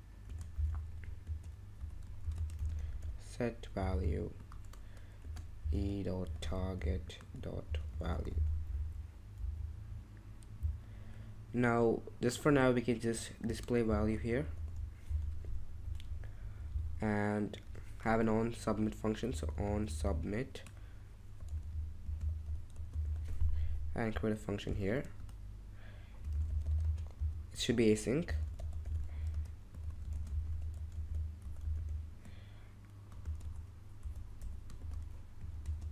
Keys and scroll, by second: 0.2-3.8 typing, 5.2-9.8 typing, 12.0-16.7 typing, 19.1-32.2 typing, 33.4-35.9 typing.